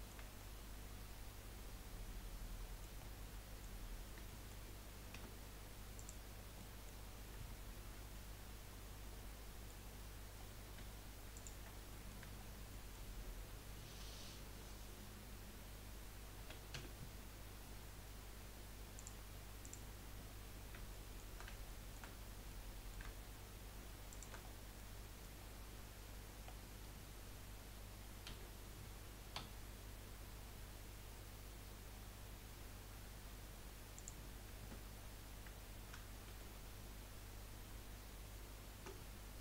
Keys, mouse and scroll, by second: 3.1 scroll down 3, 3.3-3.8 middle drag, 3.8-4.2 scroll up 1, 4.2-4.6 shift+middle drag, 4.6-5.1 scroll up 2, 5.1 Tab, 5.9 click, 6.4 scroll down 2, 6.7-10.2 middle drag, 10.2-11.3 scroll up 2, 11.3 shift+click, 11.9 middle click, 12.4-12.7 scroll down 2, 12.7 middle click, 13.1-13.9 scroll up 3, 16.4 s, 19.6 click, 20.9-24.1 shift+middle drag, 24.1 shift+click, 24.4-24.8 scroll down 3, 24.8 middle click, 25.4-26.0 scroll up 3, 26.5-26.9 scroll down 1, 28.7 g, 34.6 Tab, 36.3 ctrl+z, 37.7 ctrl+z.